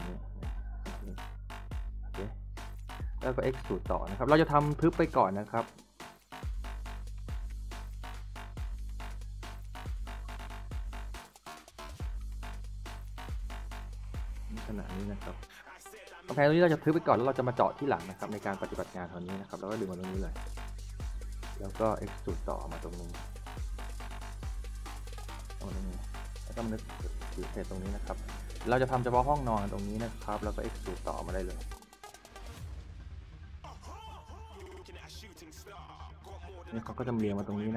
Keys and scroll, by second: 2.1 a, 2.7 s, 3.1 a, 6.3 s, 7.6 s, 12.4-13.8 typing, 16.1 a, 17.8 w, 18.8 a, 25.9 s, 31.1 a, 31.8 w, 33.4 s, 36.1 e, 36.5 w, 37.1 a.